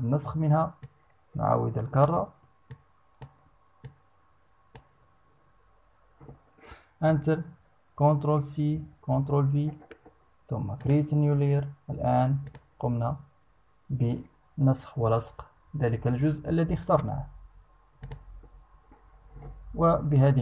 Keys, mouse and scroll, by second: 0.4-1.8 drag, 2.2 click, 3.4 click, 6.6 Return, 8.2 ctrl+c, 8.6 ctrl+v, 10.4 click, 12.0 click, 17.6 click.